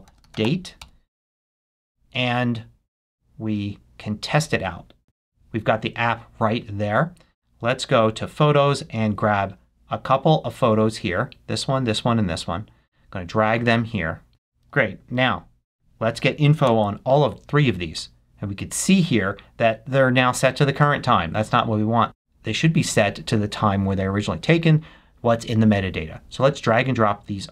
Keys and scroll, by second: 14.3 super+h, 16.6 super+i.